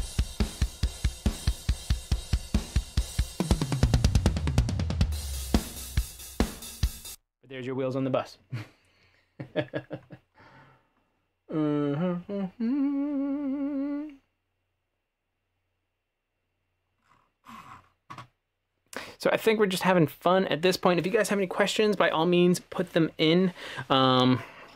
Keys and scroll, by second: 7.2 space, 8.9 space.